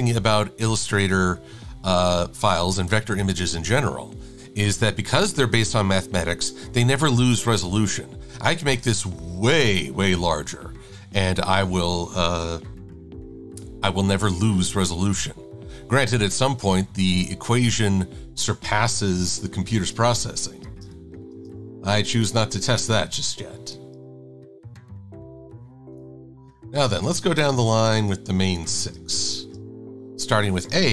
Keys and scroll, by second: 21.4 space.